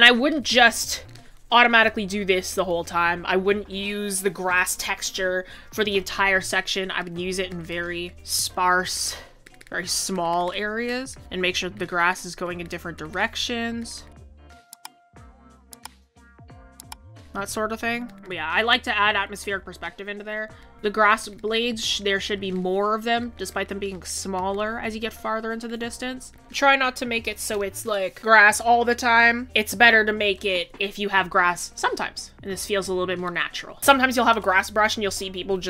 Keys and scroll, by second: 2.4 ctrl+z.